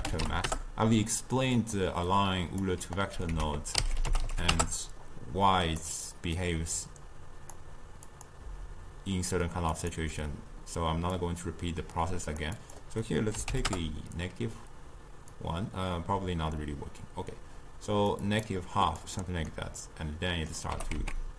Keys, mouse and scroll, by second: 2.1-3.4 drag, 3.4 ctrl+a, 6.4-19.0 drag, 19.5-20.7 middle drag, 20.7 g.